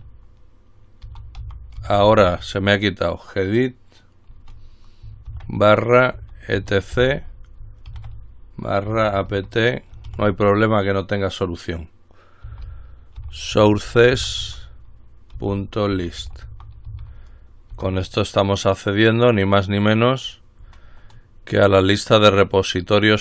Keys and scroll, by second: 2.1 typing, 5.5-10.3 typing, 12.4-17.6 typing, 17.9 Return.